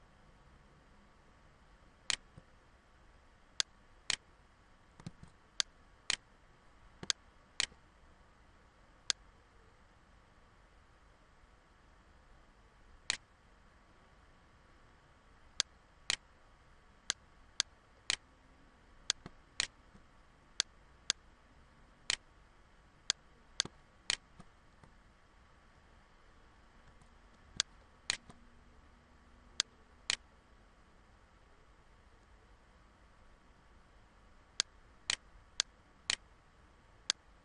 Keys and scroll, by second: 4.6 ctrl+z, 6.7 ctrl+z, 24.9 ctrl+-, 25.6 ctrl+-.